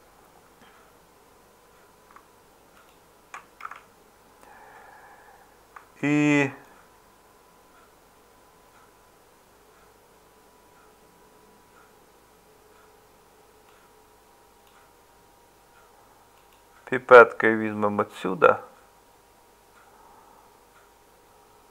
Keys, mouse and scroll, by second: 3.7 Tab.